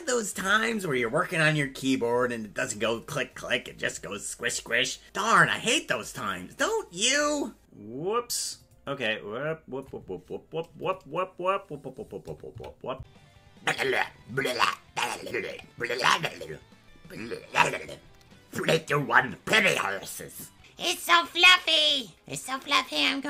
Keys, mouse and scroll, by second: 7.7 click.